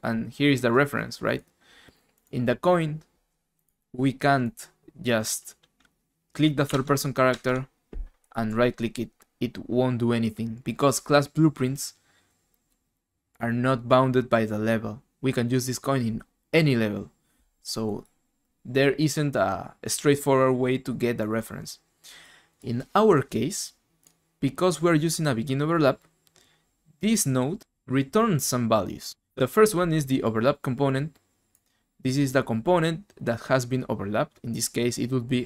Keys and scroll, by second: 6.7 alt+Tab, 7.3 alt+Tab.